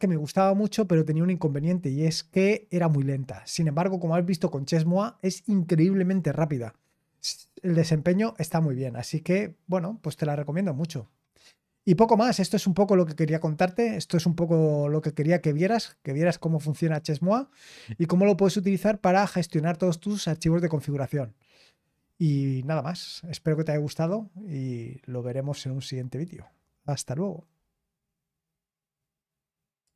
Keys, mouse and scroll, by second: 29.8 click.